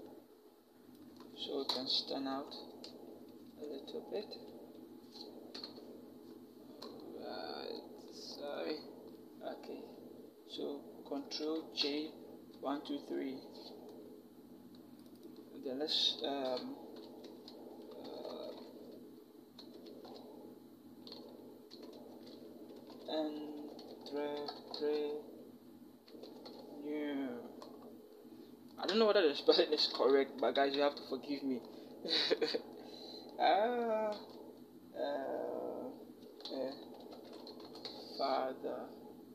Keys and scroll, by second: 1.5 alt+shift+Return, 2.1 alt+shift+Left, 2.7 shift+Left, 2.9 shift+Left, 3.1 shift+Left, 3.6 shift+Left, 5.4 ctrl+k, 11.2 ctrl+j, 11.9 ctrl+shift+j, 12.3 ctrl+shift+Down, 17.1-18.3 typing, 19.4 space, 19.7 e, 21.5-24.8 typing, 25.9 u, 26.0 e, 26.3 r, 29.6 ctrl+j, 30.2 Down, 36.1-37.7 typing.